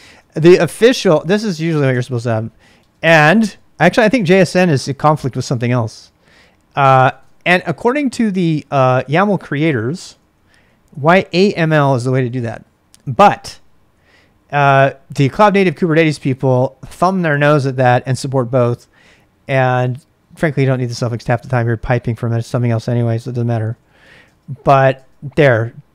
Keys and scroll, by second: 0.0-3.7 typing, 1.9 Return, 6.7-7.7 typing, 9.3-12.9 typing, 23.0-25.3 typing.